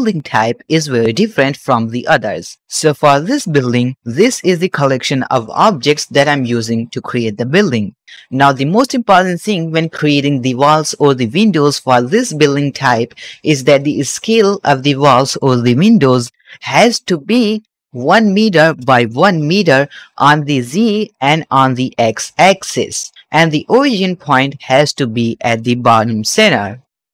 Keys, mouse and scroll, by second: 4.7 shift+b, 5.2 middle click, 6.1 drag, 6.7 shift+click, 7.3 shift+click, 7.8 shift+middle click, 14.5 click, 15.1 shift+middle click, 15.4-16.5 middle drag, 20.3 s, 20.4 z, 21.0 right click, 21.4 s, 21.5 x, 22.5 right click, 26.6 click.